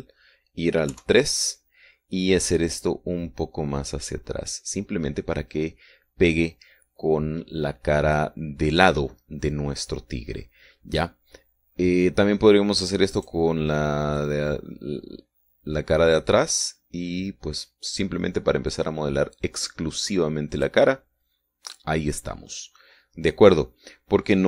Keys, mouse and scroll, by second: 2.4 KP_3, 4.2-9.8 drag, 14.6 right click, 15.7-22.4 drag.